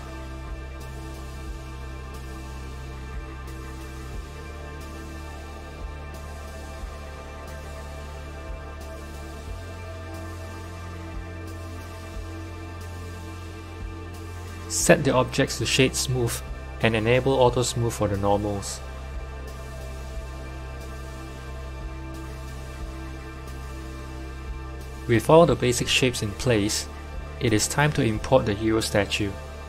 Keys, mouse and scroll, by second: 0.0 scroll up 1, 0.0 s, 5.4-6.4 middle drag, 6.4 Tab, 6.8 click, 7.1-7.4 scroll down 6, 7.4 middle click, 8.1 Tab, 8.4 click, 11.6 click, 13.4 click, 14.1-15.7 right drag, 15.7 click, 16.0-18.7 right drag, 18.7 click, 19.4 click, 20.5 click, 20.9-22.0 right drag, 22.0 click, 22.2-23.8 right drag, 23.8 click, 25.3-28.4 drag.